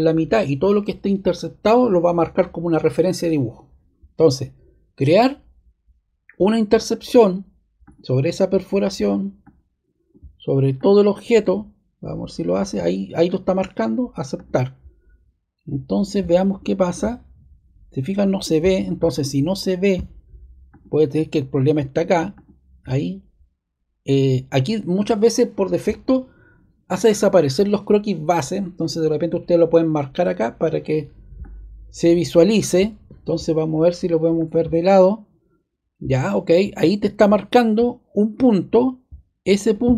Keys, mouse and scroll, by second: 6.7-9.0 drag, 32.4 click, 34.3 click, 35.0 click, 39.6 click.